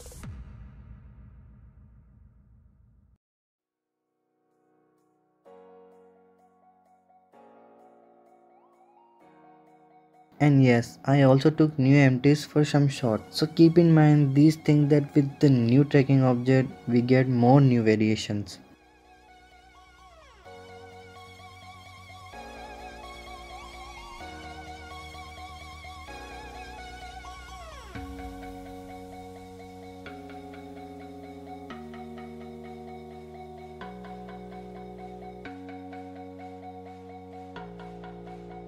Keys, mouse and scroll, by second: 1.0-3.6 typing, 1.4-1.7 middle drag, 2.0 click, 4.1 alt+g, 4.2 alt+r, 4.5 click, 4.8-5.8 drag, 5.9-6.7 drag, 6.8 click, 8.0-8.5 middle drag, 8.5 s, 9.4 shift+a, 11.0 click, 12.5 s, 13.3 click, 14.1-16.0 drag, 16.0 ctrl+KP_0, 17.3 click, 17.9 click, 19.5 click, 20.6 click, 21.7-22.9 drag, 22.9 r, 23.6 click, 24.1 click, 24.4 r, 26.9 Tab, 27.2 Tab, 27.5-28.0 drag, 28.0 Tab, 28.3 click, 29.1 r, 31.0 click, 31.6 r, 33.2 click, 34.0 r, 35.2-36.2 drag, 37.2 r, 38.0 click.